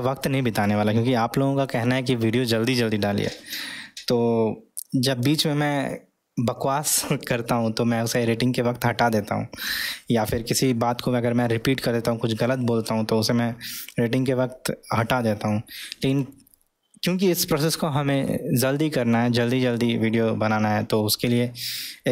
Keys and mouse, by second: 0.8-3.7 middle drag.